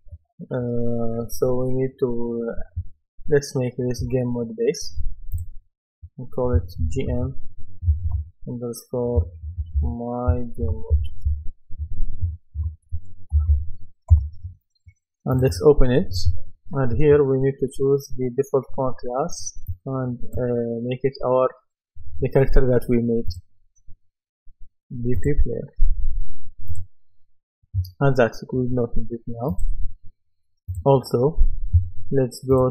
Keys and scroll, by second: 6.8 shift+g, 7.1 shift+m, 9.5-14.0 typing, 14.1 Return.